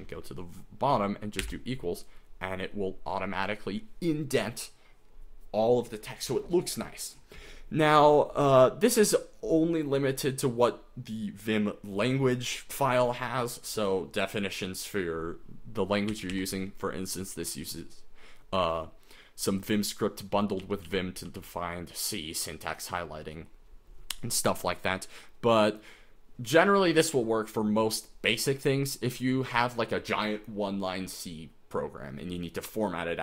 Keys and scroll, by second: 1.6 =, 16.1 j, 16.3 j, 20.4-21.9 typing.